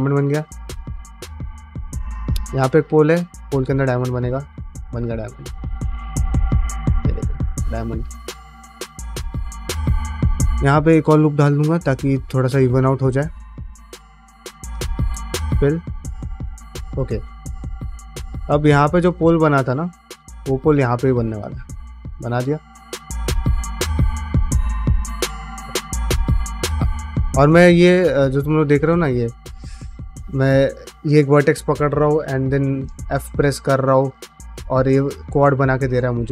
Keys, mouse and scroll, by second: 0.0-0.4 typing, 0.3 click, 0.9 middle click, 1.4 shift+middle click, 1.7 middle click, 2.5 click, 2.7 middle click, 3.6 click, 4.4 f, 5.2 middle click, 5.7 click, 5.8 g, 6.5 click, 6.6 g, 7.3 click, 7.4 g, 8.0 middle click, 9.1 click, 9.4 f, 10.3 ctrl+r, 11.5 alt+click, 11.8 g, 12.7 middle click, 13.2 click, 13.4 f, 14.2 2, 14.4 click, 14.6 f, 14.8 middle click, 15.2-18.3 middle drag, 18.7 1, 18.9 click, 19.2-20.2 middle drag, 20.8 click, 21.0 middle click, 21.3 e, 21.9 middle click, 22.3 g, 22.9 click, 23.3 f, 24.3 ctrl+z, 24.5 f, 25.5 ctrl+z, 25.6 middle click, 25.9 f, 26.7 middle click, 27.0 g, 27.7 click, 27.9 g, 28.3 middle click, 28.7 ctrl+z, 29.0 ctrl+z, 29.3 ctrl+z, 29.7 ctrl+z, 30.3 ctrl+z, 32.5 middle click, 34.1 ctrl+f, 34.2 ctrl+z, 34.4 ctrl+middle click, 34.7 f, 35.6 ctrl+middle click, 36.2 middle click.